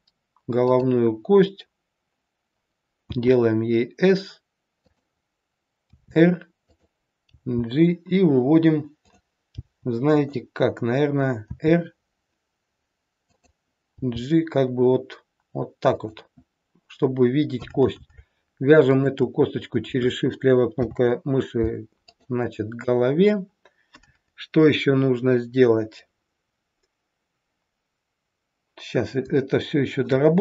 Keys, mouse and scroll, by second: 3.0 s, 5.9 r, 7.2 g, 9.5 g, 11.4 r, 13.9 g, 18.9 shift+click, 20.8 ctrl+p, 29.4 shift+middle click.